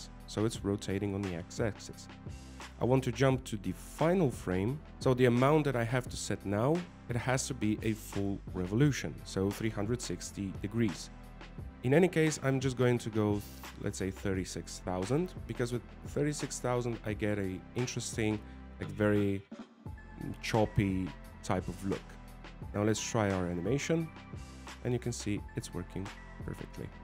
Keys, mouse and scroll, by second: 15.7 click, 18.1 0, 22.2 click, 25.0 alt+a, 26.1 scroll down 2, 26.2 middle click.